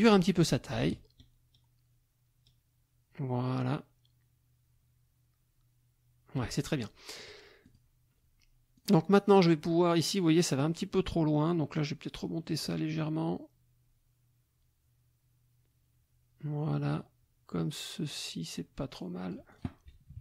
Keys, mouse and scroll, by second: 0.8-6.5 ctrl+shift+drag, 7.1 click, 7.6 click, 8.8 click, 11.7-19.5 drag, 20.1 KP_Subtract.